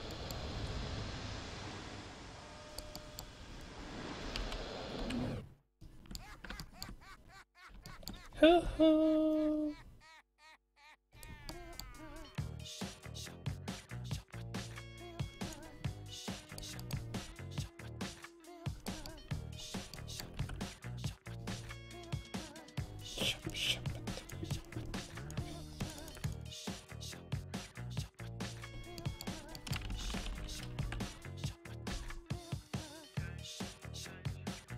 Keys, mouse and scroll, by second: 0.3 right click, 0.6 r, 3.0-4.1 middle drag, 4.2 KP_5, 4.4 KP_1, 5.0 KP_3, 11.2-13.2 right drag, 11.6-15.4 middle drag, 12.4-17.3 drag, 16.5 right click, 17.3 r, 17.5-18.7 right drag, 19.1-21.2 middle drag, 20.4 r, 21.2 click, 24.7-30.1 drag, 29.1-31.5 middle drag, 29.9 alt+s, 30.1 alt+g, 30.7 alt+r.